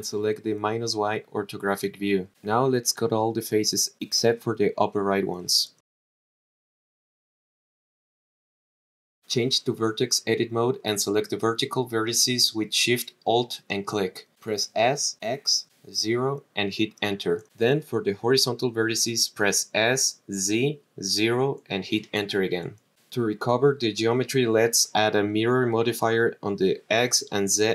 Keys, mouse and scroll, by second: 0.6 click, 2.6 click, 3.5-4.3 scroll down 1, 4.5-5.7 shift+drag, 6.3 Delete, 6.9 scroll down 3, 7.2 scroll down 1, 7.4 shift+click, 8.8 Delete, 9.2 scroll down 5, 9.4 middle click, 10.9 click, 11.5 click, 12.4 alt+shift+click, 14.3 s, 14.7 x, 15.8 KP_0, 16.8 Return, 17.5 click, 18.2 alt+shift+click, 19.6 s, 20.5 z, 21.0 KP_0, 22.1 Return, 24.5 click, 26.0-27.5 drag.